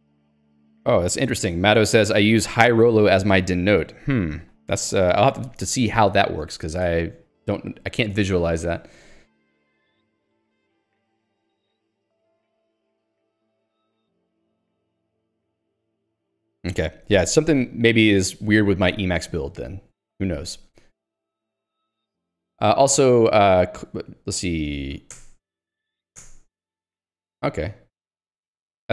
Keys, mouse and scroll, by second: 8.9 j, 19.9 Escape, 20.9 j, 22.7 k, 23.9 l, 25.0 h, 25.6 alt+Return, 25.9 j, 26.4 alt+Return.